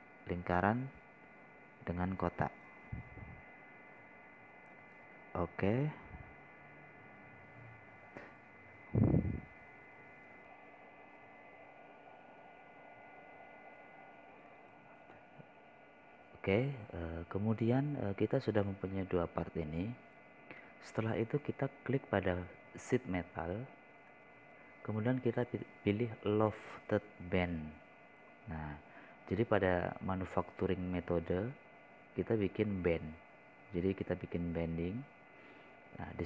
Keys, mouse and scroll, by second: 16.9 F12, 20.3-20.9 scroll up 1, 20.9 scroll down 1, 21.3 scroll up 1, 25.9 click.